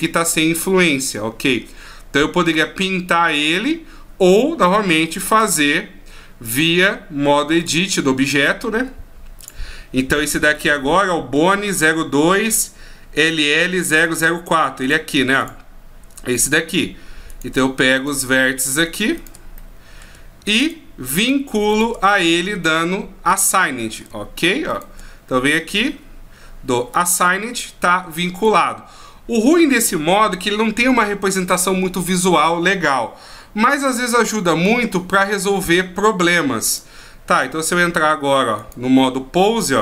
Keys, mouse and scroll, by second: 6.5 click, 7.9 click, 14.0 right click, 15.4 click, 17.3 right click, 18.0 shift+right click, 18.4 middle click, 19.2 shift+right click, 19.6 middle click, 20.6 shift+right click, 21.2 shift+right click, 21.7 shift+right click, 22.1 middle click, 23.3 shift+right click, 23.6 middle click, 24.7 shift+right click, 26.9 click, 36.7 click, 37.9 Tab, 38.6 right click.